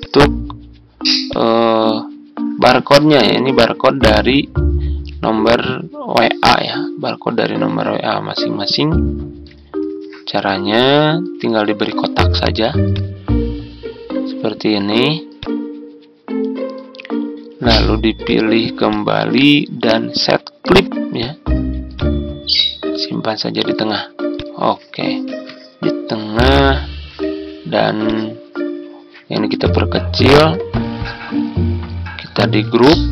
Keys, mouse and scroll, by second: 25.2 Tab.